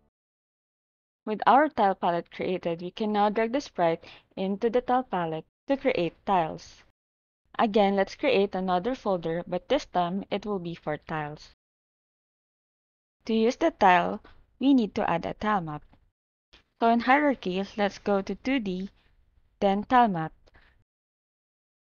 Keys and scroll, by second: 0.1 typing, 10.4 ctrl+shift+n, 10.9-12.0 typing, 16.1 ctrl+z.